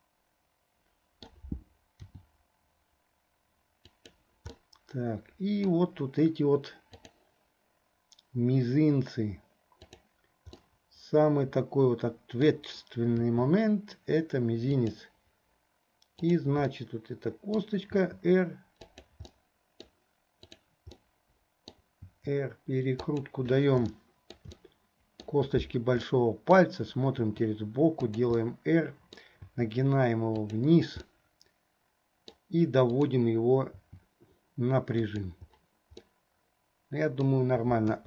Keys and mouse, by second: 2.2 r, 4.7-5.9 drag, 4.7-5.9 right drag, 10.8-12.7 middle drag, 13.4 r, 16.2 click, 16.9 middle click, 18.1 r, 19.5 middle click, 20.7 click, 21.1 middle click, 22.2 r, 24.0 shift+middle click, 24.8 middle click, 26.3 middle click, 28.8 middle click, 31.2-32.6 middle drag, 33.2 click, 34.0 r, 36.3-37.5 middle drag.